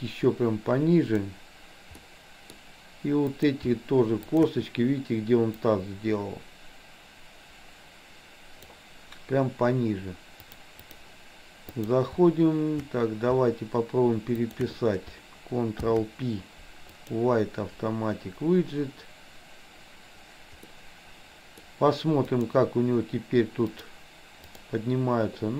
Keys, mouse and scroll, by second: 2.0 middle click, 3.4 click, 4.4 shift+click, 5.5-8.7 drag, 10.4 click, 11.7 click, 14.4 shift+click, 15.9 ctrl+p, 20.7-21.6 middle drag, 22.2 click, 23.6-24.6 drag.